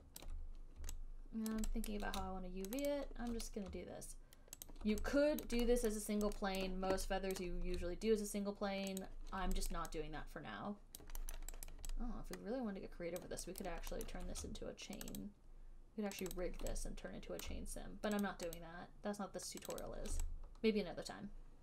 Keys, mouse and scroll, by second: 0.5 alt+click, 0.6 alt+click, 1.8 click, 2.2 alt+right click, 3.1 shift+click, 3.2 shift+click, 4.7 alt+middle click, 5.0 alt+click, 5.7 alt+right click, 6.1 alt+middle click, 6.8 alt+click, 7.6 alt+click, 9.2 shift+click, 9.4 alt+right click, 10.0 alt+right click, 11.5 alt+click, 11.7 alt+middle click, 12.1 alt+right click, 13.5 alt+click, 13.9 alt+right click, 14.4 alt+middle click, 15.4 shift+click, 15.5 shift+click, 16.6 alt+click, 16.6 shift+click, 17.7 alt+click, 18.5 shift+click, 18.9 shift+click, 20.0 shift+click, 20.1 shift+click.